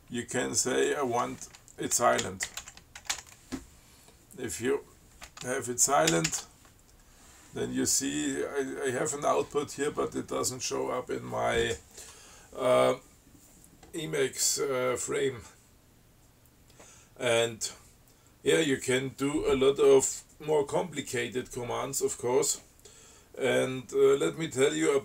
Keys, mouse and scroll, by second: 1.0 click, 2.0-3.9 typing, 6.4 ctrl+c.